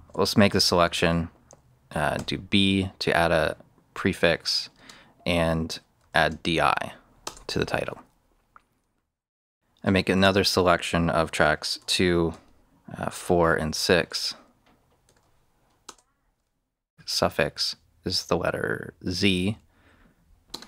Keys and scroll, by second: 0.4 Return, 2.1 b, 4.7 space, 6.0 shift+i, 7.1 shift+Return, 9.2 Return, 10.1 shift+s, 11.7 shift+2, 12.8-15.0 typing, 15.8 Return, 16.9 z, 20.4 space.